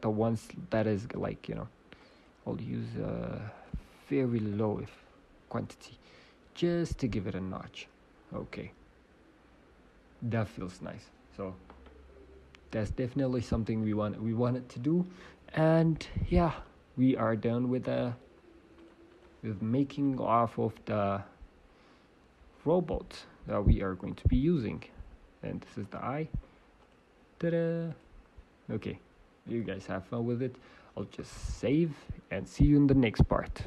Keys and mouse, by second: 0.9 middle click, 18.7-22.1 drag, 20.7 g, 22.7-24.4 drag, 23.5 f, 24.4 g, 26.7-29.8 drag, 29.7 ctrl+z.